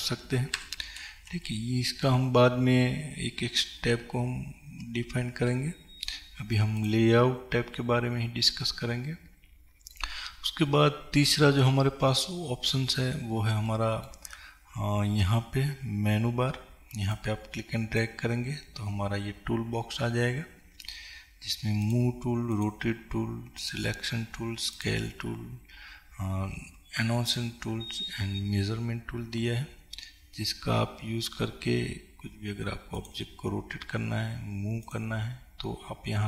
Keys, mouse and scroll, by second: 0.0 ctrl+Page_Up, 6.9-8.7 drag, 8.7-17.4 middle drag, 17.4-35.0 drag.